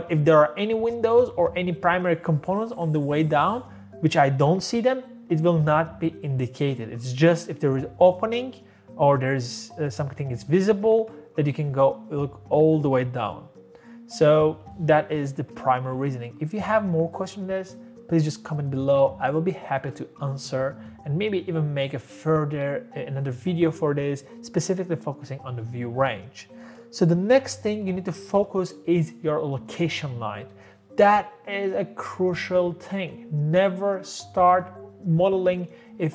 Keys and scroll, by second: 28.1 Escape.